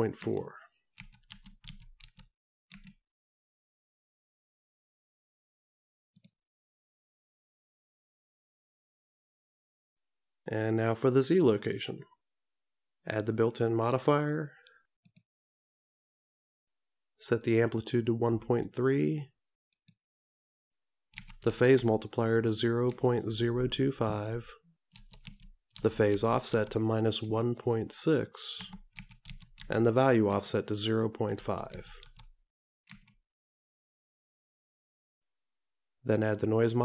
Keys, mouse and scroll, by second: 11.6 click, 15.1 click, 19.9 click.